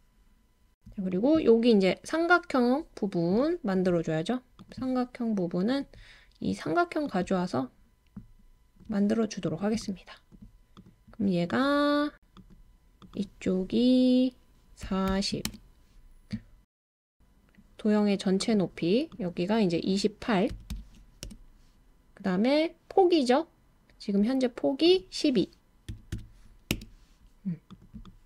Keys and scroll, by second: 14.6-16.4 typing, 20.3-21.2 typing, 25.9-26.6 typing, 26.7 Return.